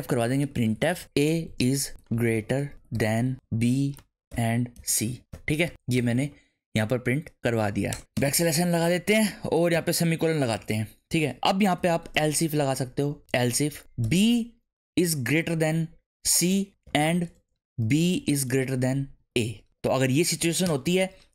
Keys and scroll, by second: 0.0-5.9 typing, 0.5 Tab, 5.0 Left, 5.3 Right, 5.6 Left, 5.7 Right, 6.2 Left, 7.9-9.7 typing, 10.5 Down, 11.5-17.3 typing, 18.5 shift+., 19.2 a, 19.8 Right, 20.4 shift+[, 20.6 Return.